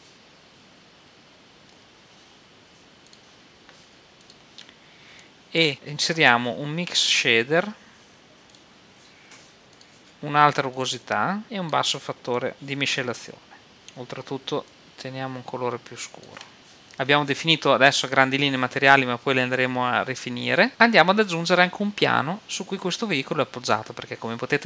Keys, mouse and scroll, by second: 4.3-6.1 drag, 6.8 shift+a, 10.1-13.3 drag, 13.8-15.4 drag.